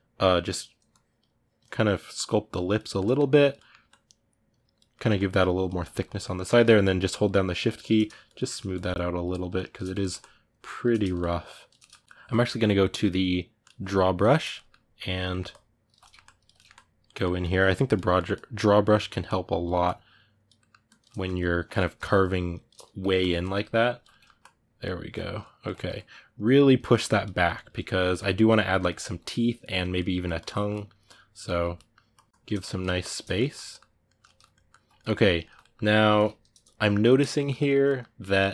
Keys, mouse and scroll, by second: 2.6 ctrl+middle click, 3.1 click, 3.3 middle click, 3.7-4.7 drag, 4.7 middle click, 4.9 click, 5.6-6.9 ctrl+middle drag, 6.9 shift+click, 7.7 middle click, 8.1 shift+click, 8.2 shift+middle click, 8.5-9.6 shift+drag, 9.6 ctrl+middle click, 9.9 shift+click, 10.7 middle click, 10.9 shift+click, 11.5 middle click, 11.8-14.3 shift+drag, 14.3 ctrl+middle click, 14.7 ctrl+click, 15.0 ctrl+middle click, 15.3 ctrl+click, 15.8 middle click, 16.0 ctrl+click, 16.3 middle click, 16.5 ctrl+click, 16.8 ctrl+middle click, 17.2 ctrl+click, 17.8 ctrl+middle click, 18.1-20.3 ctrl+drag, 20.3 ctrl+middle click, 20.6 ctrl+click, 20.8 middle click, 21.1 ctrl+click, 21.6 middle click, 22.0-23.2 shift+drag, 23.2 middle click, 23.6 ctrl+click, 23.9 middle click, 24.2-25.5 ctrl+drag, 25.5 middle click, 25.8-27.1 ctrl+drag, 27.1-30.1 ctrl+middle drag, 30.1 ctrl+click, 30.3 ctrl+middle click, 30.8 ctrl+click, 31.2 ctrl+middle click, 31.9 ctrl+click, 32.4 ctrl+middle click, 32.8 shift+click, 33.0-38.5 ctrl+middle drag.